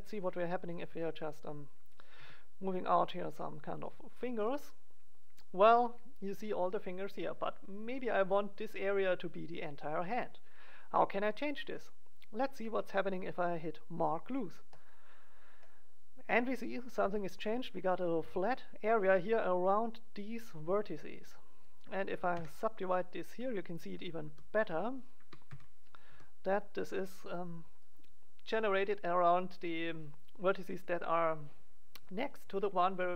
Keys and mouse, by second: 0.3 click, 0.8 e, 2.1 e, 3.2-5.5 drag, 12.1 right click, 14.6-15.7 drag, 15.7-16.7 middle drag, 21.6 right click, 22.3 w, 23.7 right click, 24.2 g, 25.1 click, 25.5 KP_1, 26.0 g, 27.9-29.0 drag, 29.7-33.0 middle drag, 33.0-33.1 drag.